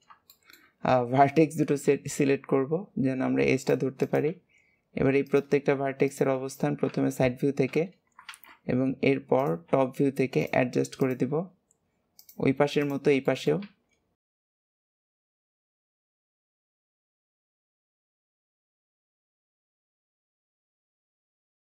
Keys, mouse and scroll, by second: 0.2-1.8 shift+middle drag, 1.8 e, 3.9 click, 6.0 shift+click, 8.2 alt+z, 8.5-8.8 scroll up 2, 9.3 click, 9.6 g, 10.9 click, 11.2 g, 12.7 shift+click, 13.1 shift+middle click, 13.6 e, 14.7 click, 14.7 g, 15.2 shift+click, 15.8 g, 16.2 shift+click, 16.5 KP_3, 16.9 click, 17.0 click, 17.1 shift+middle click, 17.5 click, 18.4 click, 18.6 click, 19.3 click, 20.4 click, 20.7 click, 21.2 click.